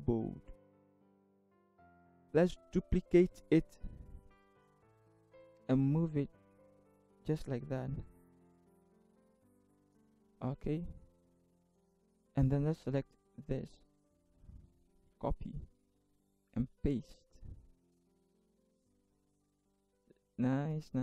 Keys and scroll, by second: 0.9 Up, 1.1 Left, 3.2 ctrl+j, 14.9 ctrl+c, 16.3 ctrl+c, 16.5 ctrl+v.